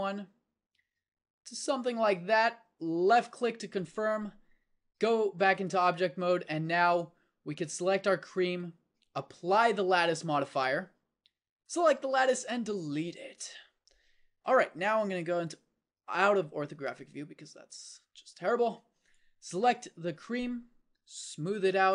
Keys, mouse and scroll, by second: 4.9 Tab, 8.3-11.7 drag, 12.3 x, 16.3 KP_5.